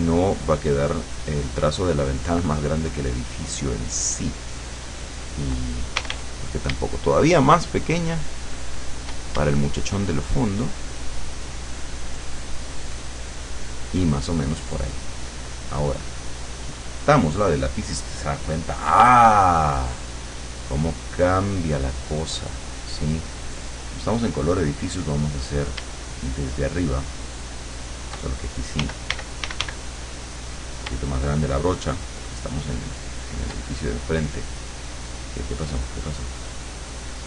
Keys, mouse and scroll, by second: 1.8-3.4 shift+drag, 4.0-5.4 shift+drag, 6.0 shift+d, 7.1-9.1 shift+drag, 9.8-11.1 shift+drag, 11.4-12.6 shift+drag, 12.9-14.0 shift+drag, 15.5 click, 17.0 click, 21.0-23.6 drag, 28.8 d, 32.5-33.6 shift+drag, 35.0 click.